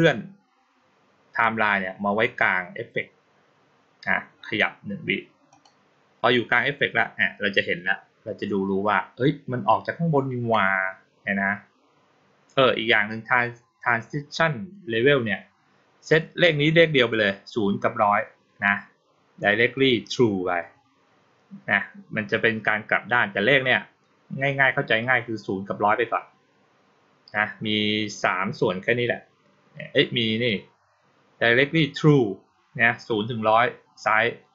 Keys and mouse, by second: 5.4 click.